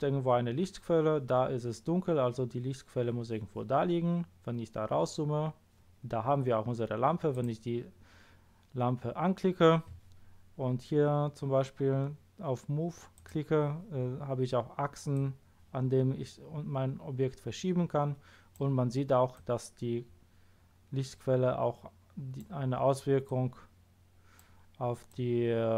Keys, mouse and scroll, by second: 4.4 middle click, 4.4-4.9 scroll down 1, 7.3 click, 13.1 click, 15.1-17.1 drag, 19.3-21.1 drag, 23.3-24.3 drag, 25.1 click.